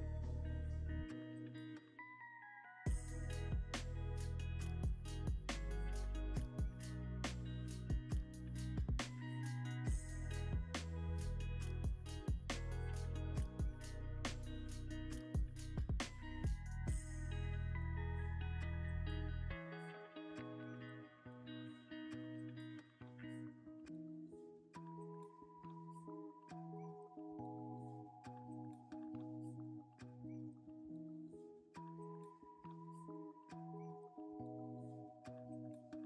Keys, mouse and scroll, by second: 0.4 g, 0.4 z, 4.8 shift+a, 7.7 double click, 9.6 alt+d, 9.6-13.9 drag, 10.2 g, 10.5 y, 11.8 r, 12.0 x, 13.8 0, 13.8 9, 14.0 Return, 16.2 r, 16.6 x, 17.2 1, 17.7 8, 18.4 Return, 19.3 g, 19.4 z, 19.5 x, 21.4 z, 21.6 g, 21.9 y, 23.1 x, 25.5 scroll down 1, 26.5 r, 27.0 z, 29.8-32.3 typing.